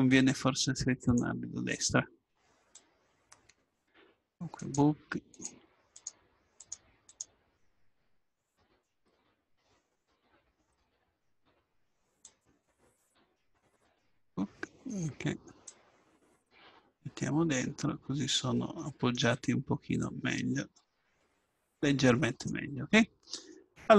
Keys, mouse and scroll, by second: 3.6 click, 4.6-15.7 drag, 15.7-16.8 drag, 16.8-18.6 middle drag, 17.4 click, 20.0-21.9 drag.